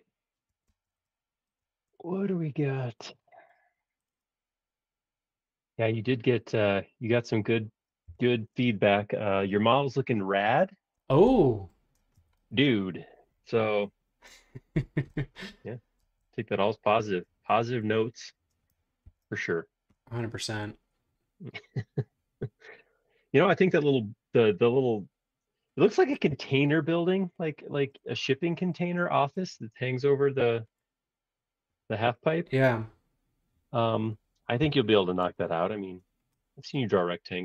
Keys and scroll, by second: 0.5 Escape, 0.7 space, 0.8 Escape, 6.0 r, 8.1 p, 9.6 space, 12.0 space, 19.0 super+1, 34.6 l, 35.2 space.